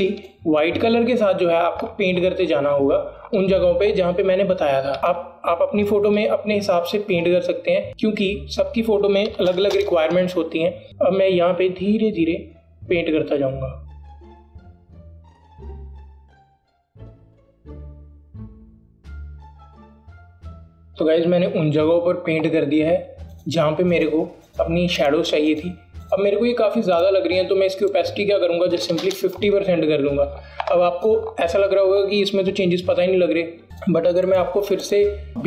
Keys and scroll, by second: 10.6 KP_0, 20.9 ctrl+KP_0, 29.9 KP_5.